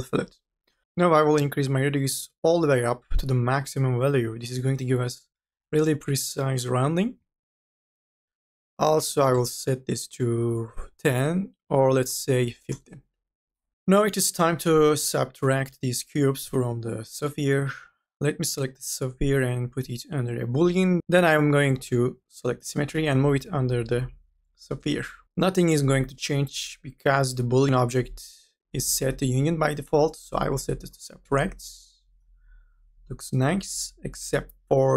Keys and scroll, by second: 1.0 ctrl+z, 9.2 KP_1, 9.6 KP_0, 11.9 KP_5, 21.0 ctrl+z.